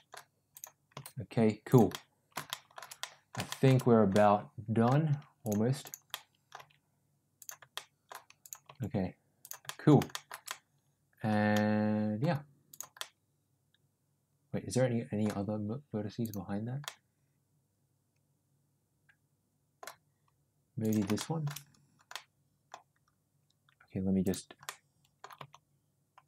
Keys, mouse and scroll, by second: 0.8 g, 1.8 middle click, 2.4 middle click, 3.1 middle click, 4.2 middle click, 5.3 click, 6.0 middle click, 6.5 g, 7.7 middle click, 8.6 g, 9.5 middle click, 10.0 middle click, 10.4 middle click, 11.4 middle click, 12.9-15.1 middle drag, 16.1 click, 16.7-19.7 middle drag, 20.7 click, 21.1 shift+middle click, 22.0 middle click, 24.1 click, 24.5 middle click, 25.3 g.